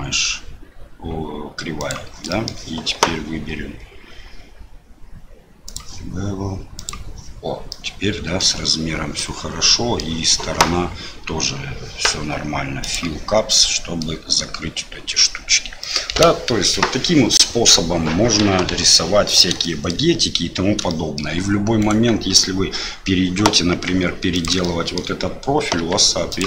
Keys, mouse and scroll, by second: 2.3 middle click, 5.6 click, 7.7 middle click, 9.2 middle click, 13.5 middle click, 15.8 middle click, 18.7 KP_7, 19.6 shift+middle click, 20.8 shift+middle click, 21.8 click, 23.7 g, 24.6 shift+click, 25.7 g.